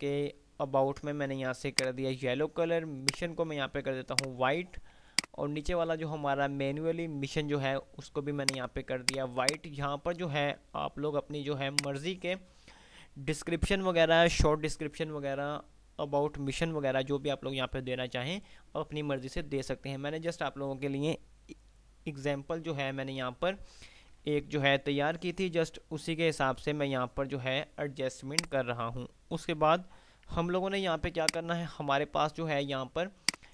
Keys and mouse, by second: 1.9 click, 3.2 ctrl+click, 5.2 click, 6.1 ctrl+r, 8.7-10.6 drag, 24.4 F3, 28.7 click, 31.1 F2, 31.6 click, 31.7-32.1 F2, 33.4-33.5 drag.